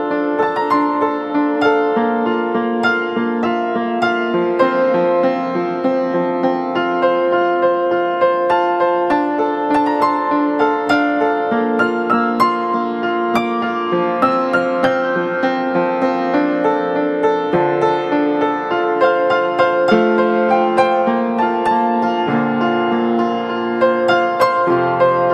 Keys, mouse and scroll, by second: 18.9-19.4 typing, 21.6 double click.